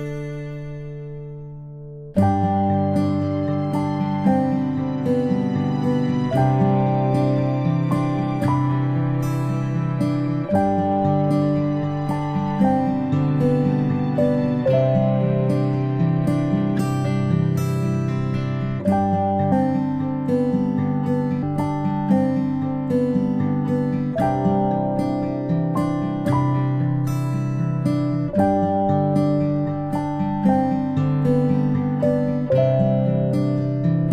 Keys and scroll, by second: 2.2 Return, 2.2 BackSpace, 3.8 Home, 4.1-7.6 typing, 10.8 Home, 10.9-11.8 typing, 15.7 ctrl+p, 21.3 ctrl+z, 21.6 ctrl+z, 31.7 ctrl+a.